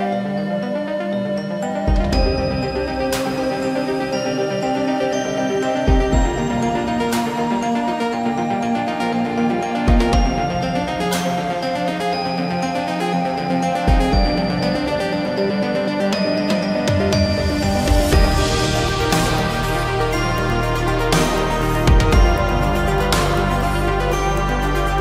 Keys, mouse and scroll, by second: 0.7 space, 3.5 shift+middle click, 10.5 shift+middle click, 18.7 shift+click, 20.1 shift+click, 20.4 shift+click, 21.6 shift+middle click, 23.1 m.